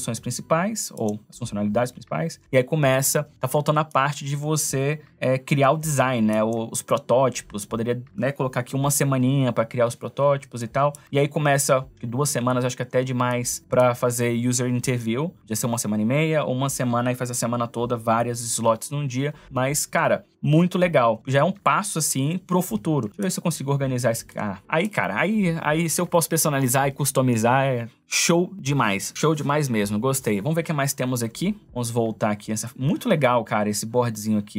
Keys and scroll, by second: 3.4 space, 10.1 space, 12.7 space.